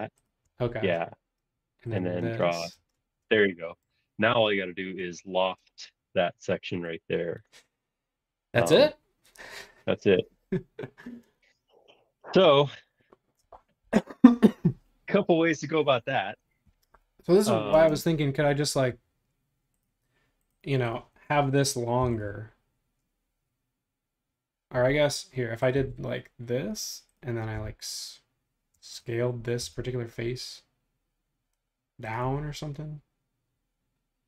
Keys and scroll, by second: 2.7 space, 22.0 p, 24.7 Escape, 27.5 s, 28.7 space, 29.6 s.